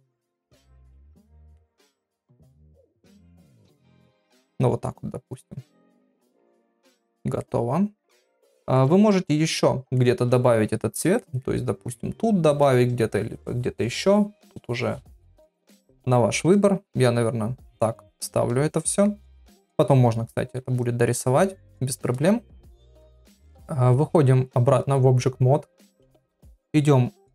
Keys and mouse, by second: 2.6-3.7 drag, 4.5 click, 5.9 ctrl+middle click, 6.2 middle click, 6.9 ctrl+middle click, 7.4 middle click, 8.4 shift+middle click, 10.0 middle click, 11.2 middle click, 11.6 middle click, 16.6-19.1 middle drag, 19.6 shift+middle click, 22.8 ctrl+Tab.